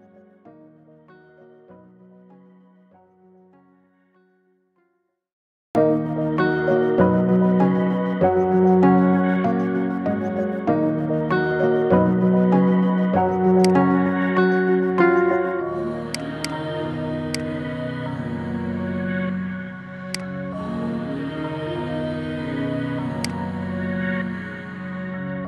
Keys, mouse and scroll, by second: 5.2-6.7 scroll up 13, 6.7-8.1 scroll up 2, 8.1-8.6 scroll up 1, 8.6-9.1 scroll up 4, 9.1-9.7 middle drag, 9.7-10.2 scroll up 2, 10.2-11.2 shift+middle drag, 11.2-11.6 scroll down 3, 11.6-12.7 middle drag, 12.7-13.4 scroll up 1, 13.4-16.1 drag, 16.2 click, 17.2 click, 18.2-18.8 scroll down 1, 18.8-19.9 shift+middle drag, 19.9 click, 21.0-21.6 scroll up 4, 21.6 middle click, 21.9-22.5 scroll up 5, 22.5-23.1 shift+middle drag, 23.1 click, 24.8-25.4 scroll down 4.